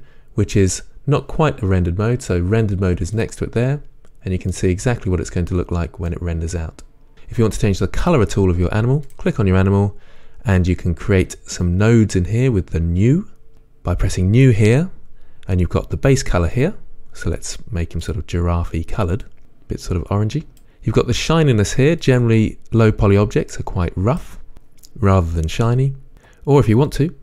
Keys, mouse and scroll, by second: 4.7-9.3 middle drag, 9.3 click, 14.6 click, 22.8-27.2 drag.